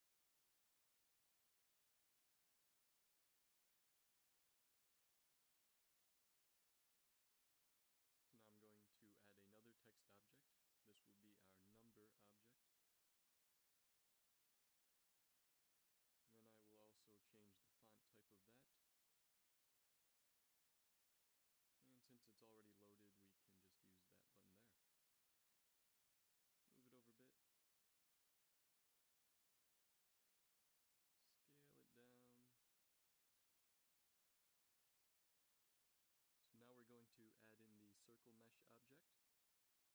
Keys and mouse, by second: 2.0-3.8 middle drag, 8.1 shift+a, 12.0 Tab, 12.7 BackSpace, 13.2 BackSpace, 13.9 1, 15.7 Tab, 25.7 g, 30.4 s, 33.1 g, 35.7 g, 37.5 a, 38.2 shift+a.